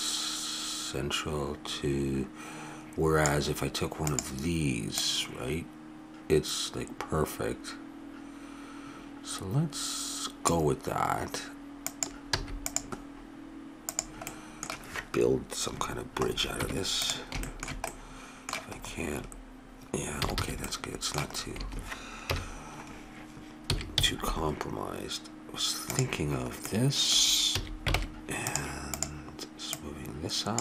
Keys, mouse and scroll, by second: 4.0-6.9 drag, 11.9-13.6 drag, 12.3 x, 13.9 right click, 14.3 middle click, 14.5-15.8 drag, 16.6 Tab, 17.5 middle click, 19.0 middle click, 19.8 middle click, 20.2 a, 20.4 a, 20.6-22.3 middle drag, 22.3 KP_Decimal, 23.7 s, 27.5 a, 28.0 ctrl+Tab, 28.9 right click.